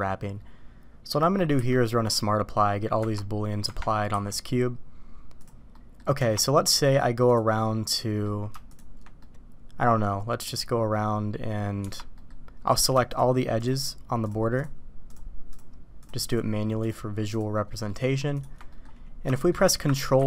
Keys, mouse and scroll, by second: 1.6 q, 3.0 Tab, 3.6 Tab, 4.1 q, 5.7 middle click, 6.2 Tab, 6.7 middle click, 7.3 click, 7.6-8.2 middle drag, 8.7 shift+click, 9.2-10.4 middle drag, 11.8 Tab, 12.1 middle drag, 15.0-17.3 shift+drag, 17.7 shift+middle click, 18.3 shift+click, 18.7 middle click, 19.3 shift+middle click, 20.1 ctrl+e.